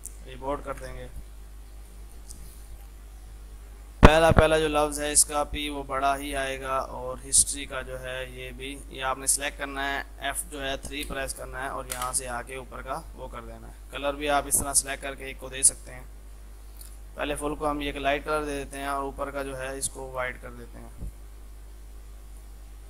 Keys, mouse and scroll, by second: 1.0 e, 1.1 click, 1.4 F2, 1.5-5.8 drag, 5.8 shift+p, 7.3-10.9 drag, 10.9 shift+F3, 11.4 Down, 12.0 Return, 14.3-21.0 drag.